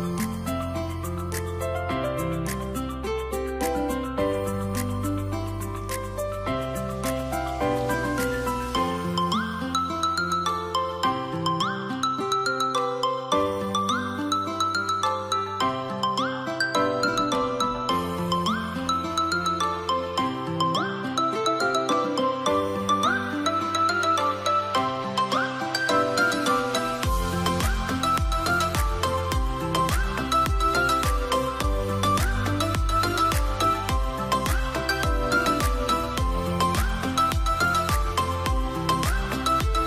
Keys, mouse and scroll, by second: 4.4 alt+click, 19.7 double click, 22.4-23.5 scroll down 1, 27.7 double click, 29.2 1, 30.3 BackSpace, 32.7 2, 33.5 Return, 34.7-36.8 scroll down 1, 37.6-39.5 scroll up 1.